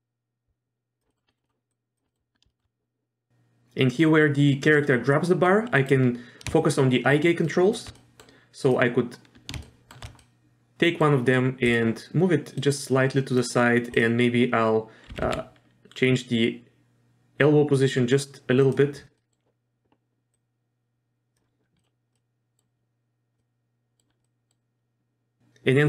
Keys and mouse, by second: 1.1 middle click, 1.3 middle click, 1.4 middle click, 1.7 click, 2.1 middle drag, 2.5 shift+middle drag, 5.6 middle drag, 6.6-7.1 shift+middle drag, 7.5 shift+middle drag, 7.9 middle drag, 9.6 shift+middle drag, 10.2 middle click, 11.6 click, 12.7 click, 13.9 click, 15.1 r, 19.2 middle click, 20.3-21.3 drag, 21.8 middle click, 22.1-22.6 middle drag, 23.4-24.0 middle drag, 24.2 middle drag.